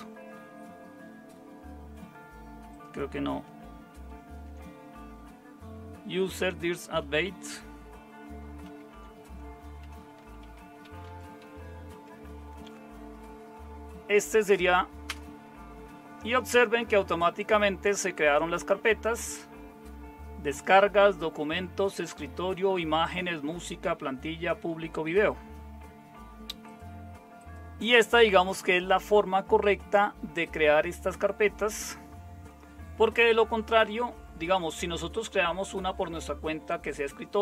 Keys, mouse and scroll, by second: 4.0 super+7, 8.7 super+0, 10.0-11.9 typing, 12.0 Tab, 15.1 Return.